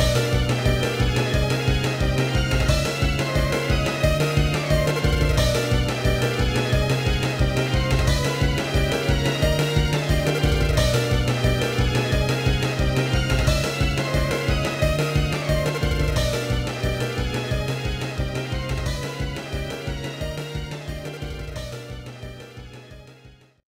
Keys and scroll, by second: 6.2 ctrl+-, 6.6 ctrl+=, 7.1 ctrl+-, 7.3 ctrl+=, 11.3 ctrl+-, 11.4 ctrl+=, 12.3 ctrl+c, 13.0 ctrl+=, 13.8 ctrl+-, 14.0 ctrl+=, 15.3 ctrl+-, 15.5 ctrl+=, 15.6 ctrl+-, 15.8 ctrl+=.